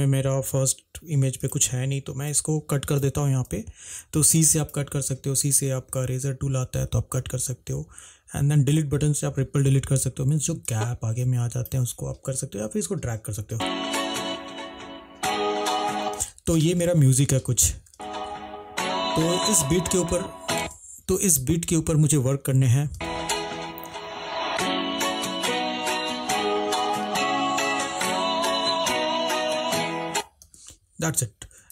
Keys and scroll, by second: 2.4 v, 3.4 Delete, 9.3 Delete, 13.7 space, 16.3 space, 17.1 -, 18.0 space, 20.8 space, 30.6 space.